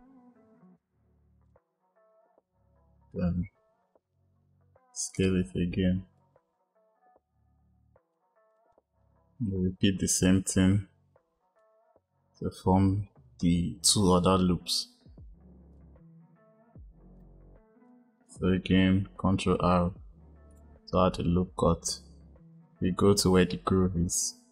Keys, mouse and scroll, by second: 4.9-6.1 drag, 8.4 click, 9.5-12.5 drag, 15.6 click, 17.1 click, 19.0 ctrl+r.